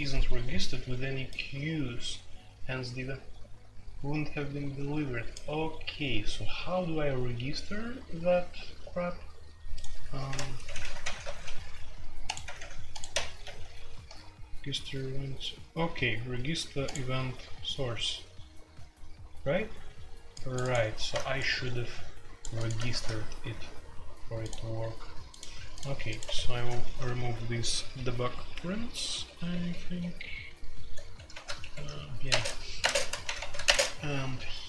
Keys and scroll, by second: 10.3 ctrl+g, 10.5-11.3 typing, 12.4 typing, 13.4 F3, 22.9 shift+c, 26.2 Escape, 26.9-27.4 typing, 28.5-29.9 typing, 31.3 ctrl+r, 31.6 Escape, 31.7 F2, 32.3 space, 32.3 Tab, 32.8 space, 33.0 Tab, 33.2 ctrl+c, 33.4 ctrl+c, 33.6 space, 33.7 Tab.